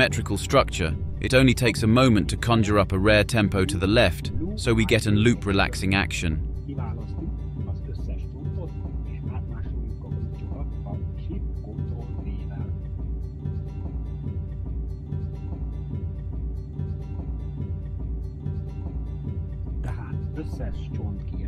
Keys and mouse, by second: 2.9 a, 6.7 middle click, 6.9-9.2 drag, 20.2-21.4 drag.